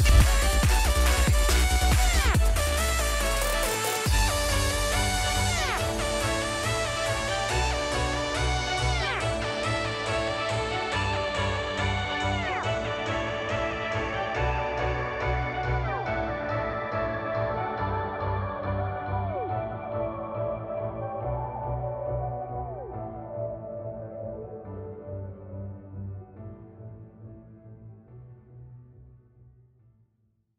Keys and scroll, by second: 6.1 space, 7.3 space, 9.0 space.